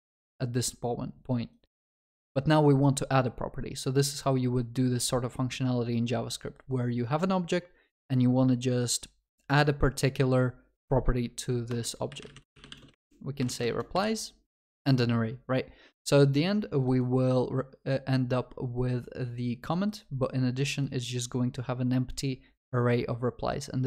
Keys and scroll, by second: 14.8 ctrl+s.